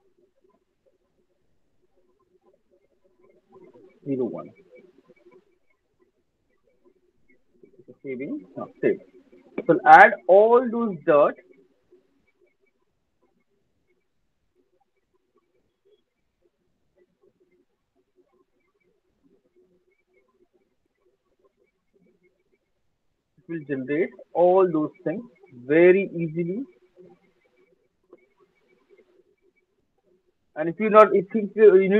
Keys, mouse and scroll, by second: 0.0-4.3 typing, 5.6 Return, 7.5 alt+right click, 8.9 alt+right click, 9.3 alt+middle click, 9.7 alt+click, 10.1 alt+middle click, 10.5 alt+click, 12.5 click, 14.4 click, 15.8 click, 16.3 alt+right click, 16.8 alt+middle click, 18.4 click, 20.3 alt+scroll, 20.6 click, 24.0 alt+click, 26.0 click, 26.8 alt+scroll, 27.2 alt+click, 27.7 alt+scroll, 28.2 alt+click, 28.4 alt+middle click, 30.0 click.